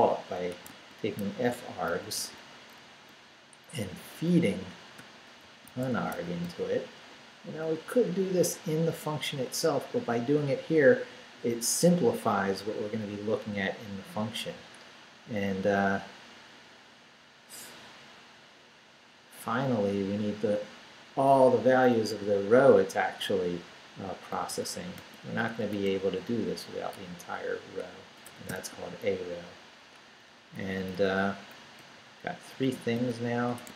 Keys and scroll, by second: 0.0-2.7 typing, 4.7-7.8 typing, 24.4-29.1 typing, 30.1 Down, 31.8 Left, 32.9-33.7 typing.